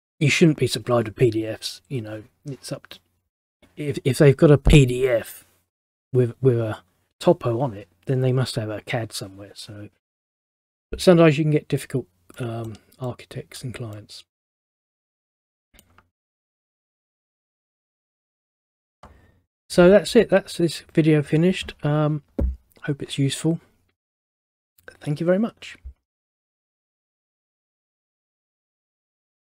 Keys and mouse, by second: 12.5 middle click, 18.3 click, 18.4 click.